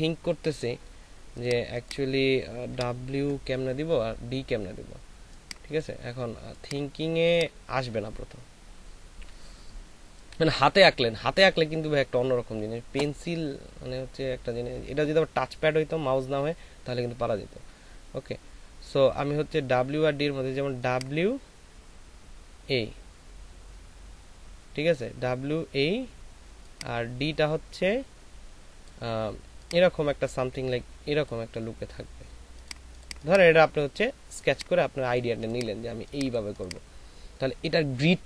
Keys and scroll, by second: 2.7 Delete.